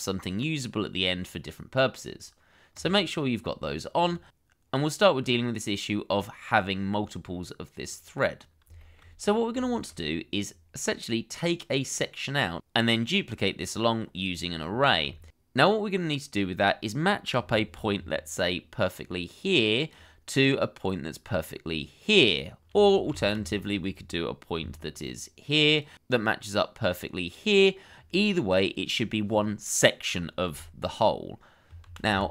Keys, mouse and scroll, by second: 5.0-7.1 scroll up 1, 8.8 shift+middle click, 9.1-9.5 scroll up 1, 9.6 shift+middle click, 10.4-10.8 scroll down 1, 10.9 scroll up 1, 11.7-13.8 scroll down 1, 14.5-15.0 scroll up 1, 15.1 shift+middle click, 15.4-15.8 scroll up 1, 15.9 shift+middle click, 17.9 d, 23.1 ctrl+z, 24.6 d, 31.8 ctrl+z.